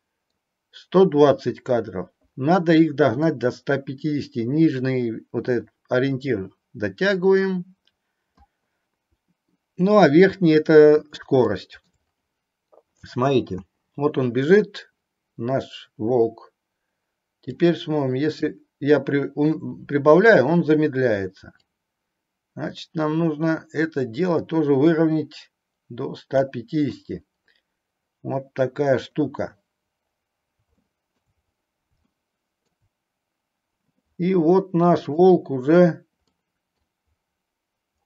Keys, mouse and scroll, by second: 0.0 middle click, 3.6-8.7 drag, 11.6-11.9 middle drag, 13.7 space, 17.6 click, 21.7-26.5 drag, 30.8-31.2 middle drag, 32.2-32.7 middle drag, 35.2 click, 36.5 middle click.